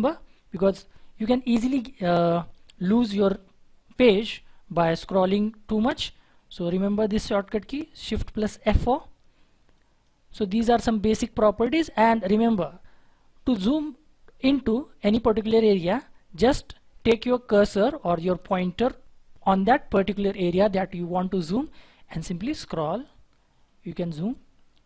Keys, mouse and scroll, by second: 1.9-5.3 scroll up 1, 8.5 shift+F4, 22.7-24.8 scroll up 1.